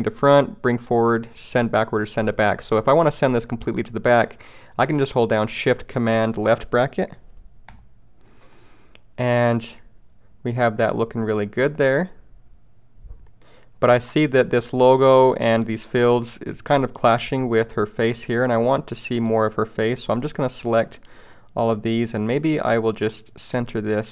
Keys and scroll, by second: 7.7 shift+super+[.